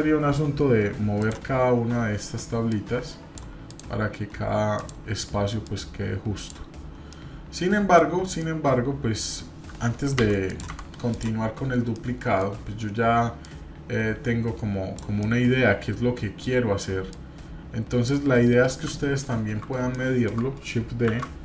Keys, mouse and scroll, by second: 1.2 click, 2.7 click, 3.7 click, 4.7 click, 5.6-6.5 drag, 6.8 scroll down 2, 7.1-8.0 middle drag, 8.0-8.4 scroll up 2, 8.4-9.3 middle drag, 10.1 Delete, 10.4 click, 10.7 Delete, 11.1 click, 11.9-12.4 shift+middle drag, 13.4-15.0 drag, 15.2-16.5 middle drag, 17.1 click, 18.6 KP_7, 19.2 scroll down 1, 19.9-20.4 shift+middle drag, 20.4 shift+scroll down 1, 21.1 shift+d.